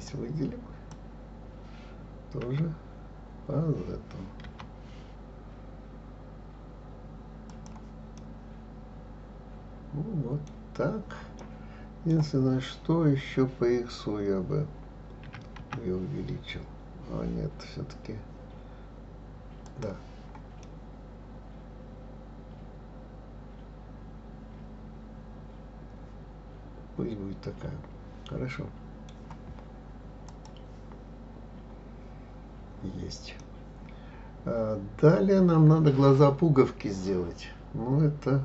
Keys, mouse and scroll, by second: 0.0 click, 2.4 g, 8.1-11.2 middle drag, 11.4-14.4 middle drag, 15.2 s, 20.6-23.7 middle drag, 30.2 click, 31.3-32.6 scroll down 1, 32.6-33.4 scroll up 1, 33.4-36.4 middle drag.